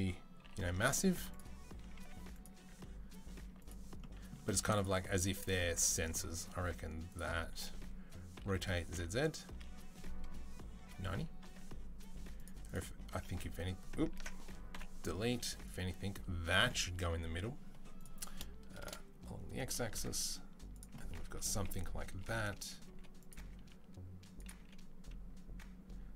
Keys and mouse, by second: 0.2-12.5 middle drag, 0.2 g, 1.8 s, 2.5 s, 5.2 g, 8.2 r, 11.8 s, 12.5 click, 12.6-13.8 middle drag, 13.0 h, 13.8 ctrl+click, 14.1 ctrl+z, 14.1-15.5 middle drag, 14.6 Delete, 15.5 click, 17.9-21.7 drag, 20.0 s, 21.7 KP_3, 22.7 g, 23.2 s, 24.4 g.